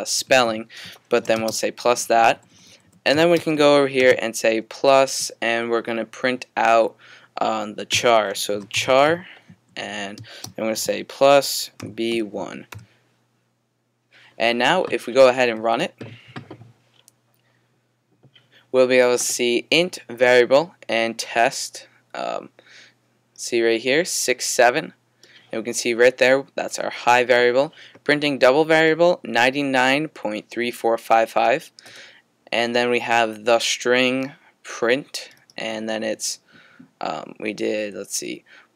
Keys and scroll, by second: 7.9-12.7 typing.